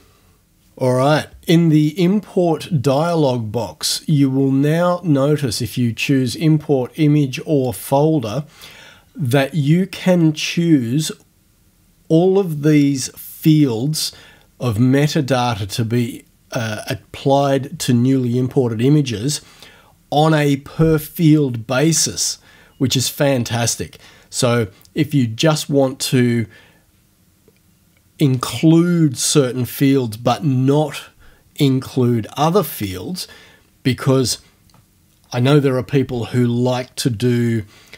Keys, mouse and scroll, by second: 3.0 click, 7.7 click, 21.3 click, 22.1 click.